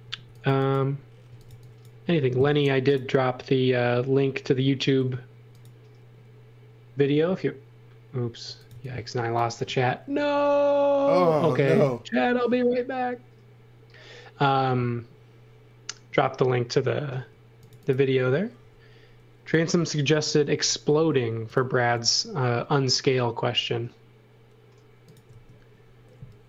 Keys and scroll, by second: 0.0-2.5 typing, 8.4 x, 8.7 v, 11.6 m, 17.1 space, 18.6 l, 19.9 space, 20.9 l, 25.3 space.